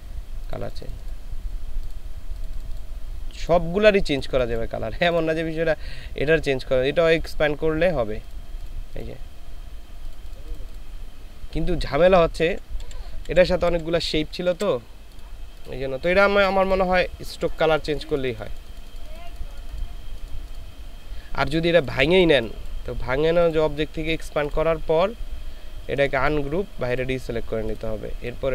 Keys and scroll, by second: 12.4 ctrl+z, 12.8 ctrl+z, 13.7 ctrl+z, 14.5 ctrl+z.